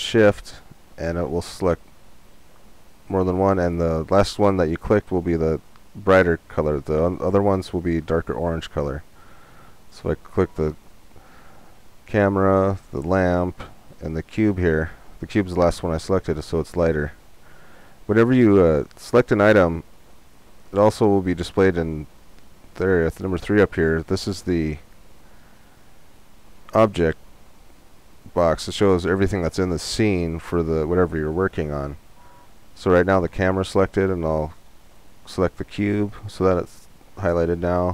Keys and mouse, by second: 9.7-11.7 right drag, 12.3-20.8 right drag, 34.8-36.5 right drag.